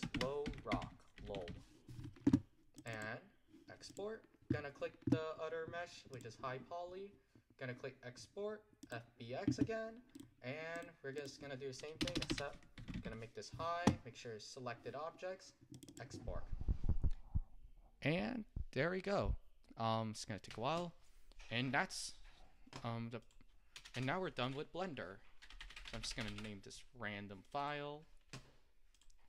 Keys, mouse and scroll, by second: 4.0 click, 9.2-14.9 drag, 26.9 s.